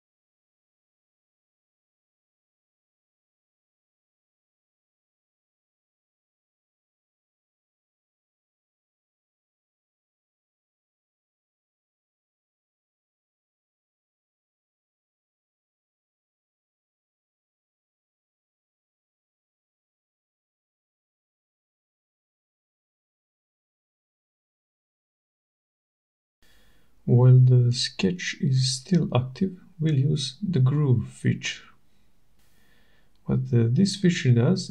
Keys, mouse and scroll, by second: 0.1 click, 5.0 click, 7.6 click, 11.6 click, 13.4-14.3 typing, 15.6 click, 20.2 click, 23.3 click, 24.8 click, 30.5 click, 34.3 click.